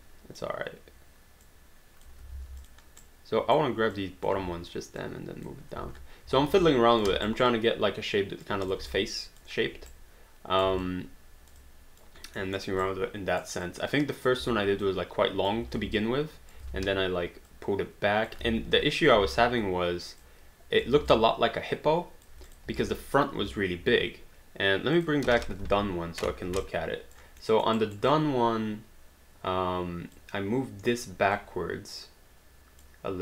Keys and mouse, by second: 1.4 click, 2.3 ctrl+z, 2.6 click, 3.0 right click, 3.9 click, 4.4 w, 5.0 click, 5.8 space, 6.8 alt+click, 7.3 alt+d, 7.4 alt+right click, 7.5 alt+click, 8.7 click, 9.0 alt+click, 9.9 right click, 10.8 alt+click, 12.5 alt+middle click, 12.8 right click, 13.7 click, 14.5 w, 14.8 click, 16.0 alt+d, 16.0 alt+click, 17.1 ctrl+z, 17.5 click, 18.8 alt+click, 19.2 ctrl+z, 20.2 click, 21.0 alt+d, 21.1 alt+click, 22.5 click, 24.9 click, 25.7 h, 26.6 alt+click, 27.5 alt+middle click, 27.8 alt+right click, 28.4 alt+click, 31.4 alt+click.